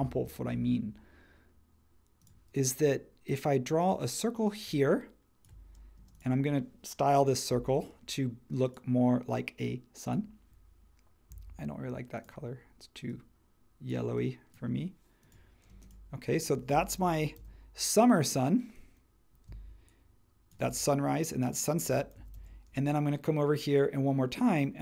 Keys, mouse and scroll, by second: 6.0 space, 15.7 space, 17.0 super+c, 17.3 super+v, 22.1 super+c, 22.3 super+v.